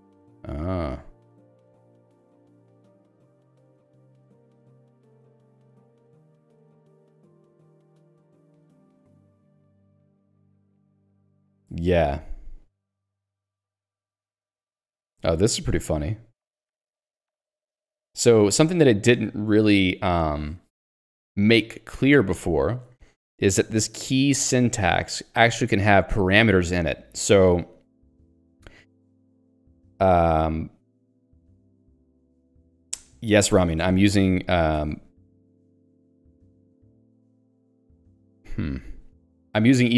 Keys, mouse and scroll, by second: 0.2 j, 2.0 ctrl+d, 6.5 ctrl+u, 17.1 click, 18.6 click, 30.8 click, 34.8 ctrl+z, 37.3 shift+q.